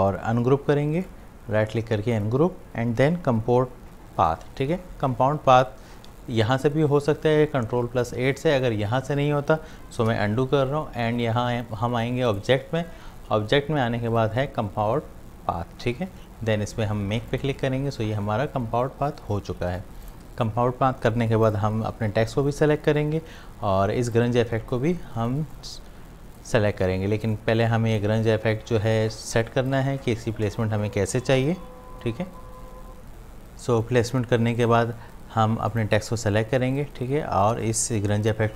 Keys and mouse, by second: 1.0 right click, 2.2 click, 4.3 ctrl+8, 9.7 ctrl+8, 12.3 click, 17.3 click, 20.1 click, 24.2-32.1 drag, 34.6 click.